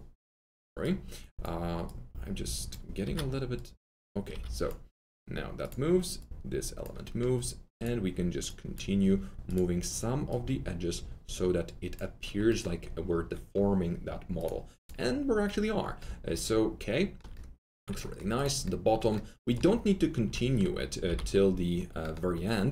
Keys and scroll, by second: 3.0 F3, 4.3 F3, 9.0 F3, 21.0 alt+t, 21.1 alt+z.